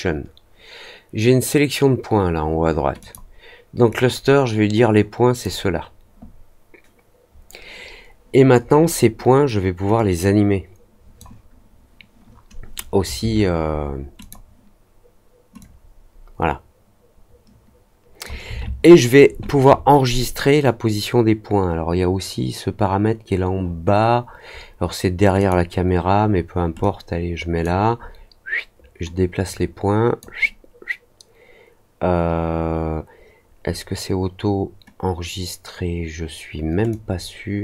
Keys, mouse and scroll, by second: 2.9 click, 3.8-5.3 drag, 9.9-11.1 drag, 14.1 click, 15.5-18.2 drag, 25.3 click, 26.7-27.6 drag, 29.4 click, 36.8-37.6 drag.